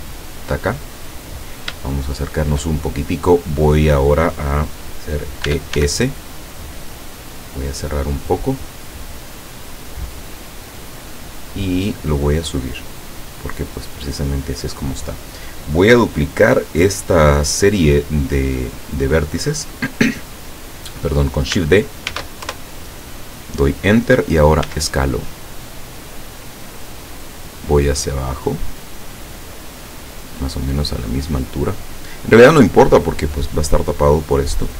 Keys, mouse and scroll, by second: 0.6 click, 1.3-1.7 scroll up 2, 1.9 shift+middle click, 2.8 shift+scroll up 3, 5.5 e, 5.8 s, 11.2 click, 12.0-14.2 drag, 22.1 shift+d, 22.5 shift+KP_Enter, 24.7 s, 26.5 click, 27.6-31.9 drag.